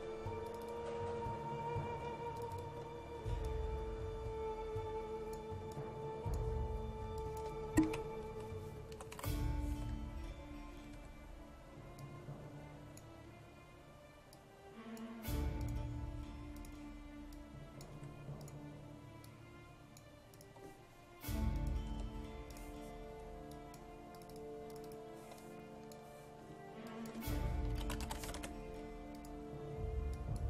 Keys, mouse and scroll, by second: 3.5-4.6 drag, 5.5 click, 7.9 typing, 8.9-9.7 typing, 11.0 2, 12.0-20.4 drag, 18.0 1, 21.9 BackSpace, 22.5-27.9 drag, 27.5-28.9 typing, 29.2 click.